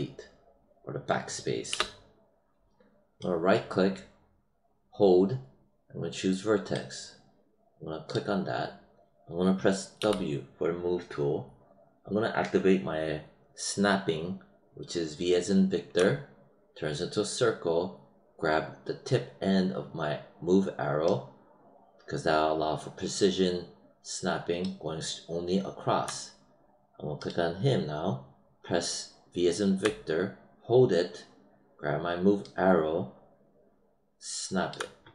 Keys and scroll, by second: 1.6 BackSpace, 9.9 w, 15.9 v, 29.7 v.